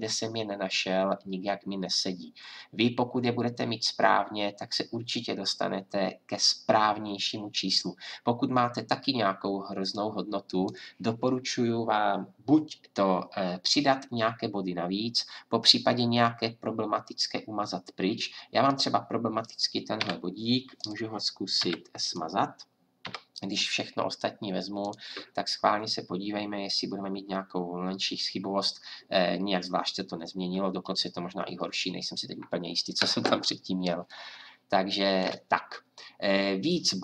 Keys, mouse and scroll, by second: 9.9 click, 18.7-20.0 right drag, 20.0 a, 20.7 right click, 21.6 Delete, 23.0 a, 24.8-26.9 drag.